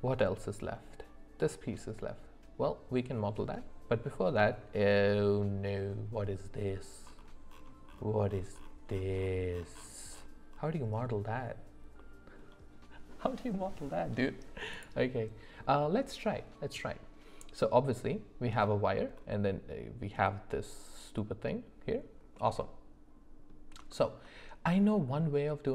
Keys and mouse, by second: 22.6-23.5 middle drag, 23.9 shift+middle click.